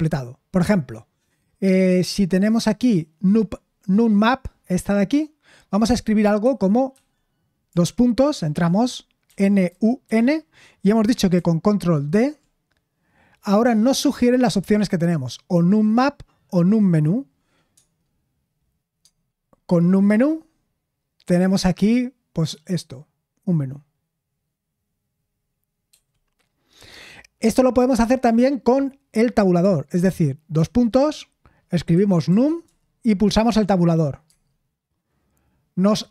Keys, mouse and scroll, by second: 6.9 Escape, 9.8-10.5 typing, 12.1 ctrl+d, 30.7 typing, 32.4-33.1 typing.